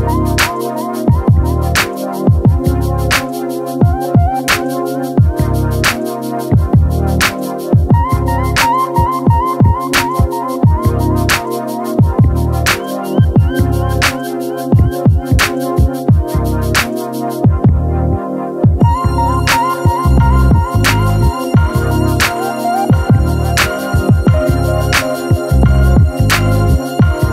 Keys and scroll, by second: 23.4 ctrl+l.